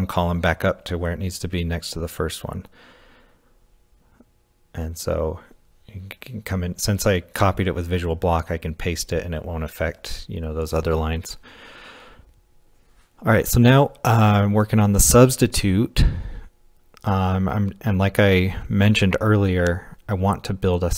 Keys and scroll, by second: 0.3 w, 0.7 h, 2.1 x, 4.3-8.6 typing, 14.9-17.6 typing.